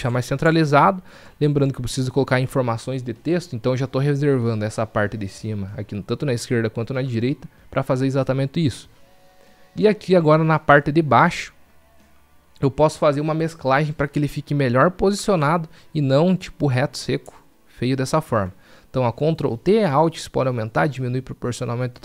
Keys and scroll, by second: 19.3 ctrl+t.